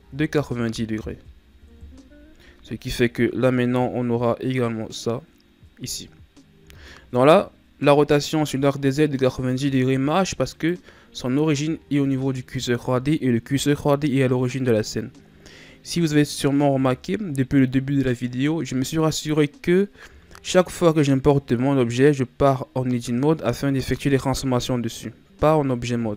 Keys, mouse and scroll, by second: 2.6 scroll down 1, 2.8-6.5 middle drag, 6.5 a, 7.1-8.1 middle drag, 8.1-10.5 scroll up 3, 10.5 right click, 11.3-11.7 scroll down 2, 11.7 shift+scroll up 1, 13.7-16.7 scroll up 1, 16.7 KP_1, 20.2-21.0 shift+scroll up 2, 21.0-22.7 scroll up 1.